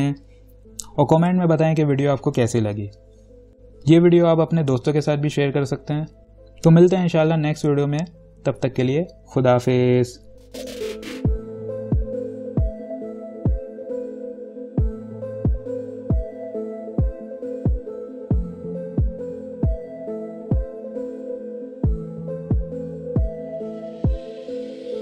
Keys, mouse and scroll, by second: 10.8 Caps_Lock.